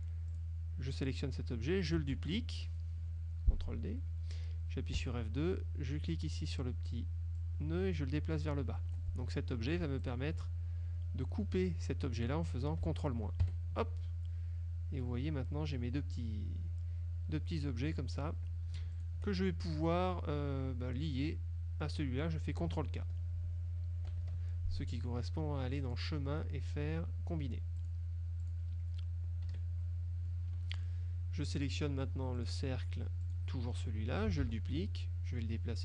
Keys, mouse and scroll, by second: 0.4 click, 2.2 ctrl+d, 5.0 F2, 7.4-9.2 drag, 10.1 shift+click, 13.5 ctrl+KP_Subtract, 19.1 shift+click, 24.2 ctrl+k, 25.9 click, 27.9 click, 28.5 click, 29.6 KP_Subtract, 30.4 click, 31.0-32.0 scroll up 1, 32.5 click, 33.4 click, 34.5 ctrl+d, 35.1-35.8 drag.